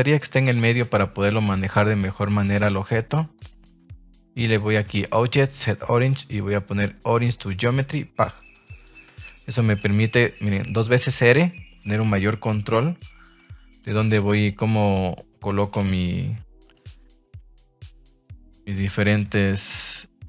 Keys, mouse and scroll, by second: 2.8-7.4 drag, 8.7 shift+middle drag, 9.6 click, 9.8 r, 10.0 r, 11.6 Escape, 12.5 KP_3, 13.1 shift+middle drag, 13.8 g, 14.4 click, 14.7 r, 15.6 click, 16.6 click, 17.2 click, 17.7 click, 17.9-18.6 middle drag.